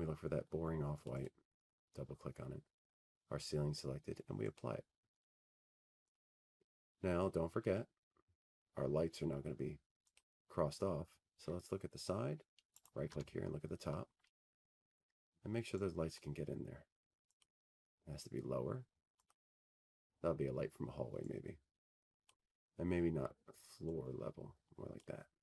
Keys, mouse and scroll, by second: 2.6 click, 5.4 click, 6.7 click, 6.9 click, 10.2 click, 11.8 click, 13.2 click, 13.2-15.6 scroll, 15.8 click, 18.5 right click, 18.7 t, 19.4-20.5 scroll, 21.7 click, 23.1 click, 23.8-25.4 drag.